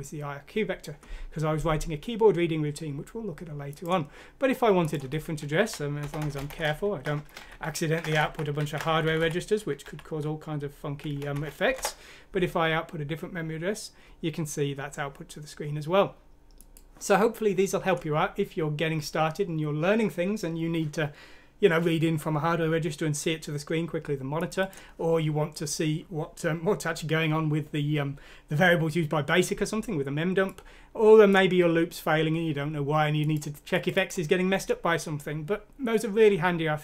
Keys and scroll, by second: 5.7 Right, 6.2-11.3 typing, 9.8 F6, 11.1 Escape, 11.7 F6, 11.8 Return.